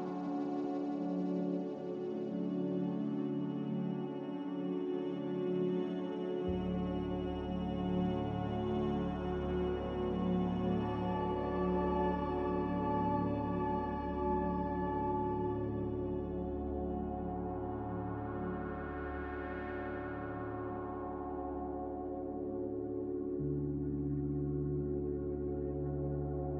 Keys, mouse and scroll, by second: 1.7 Delete, 7.0 Delete, 14.7-15.6 typing.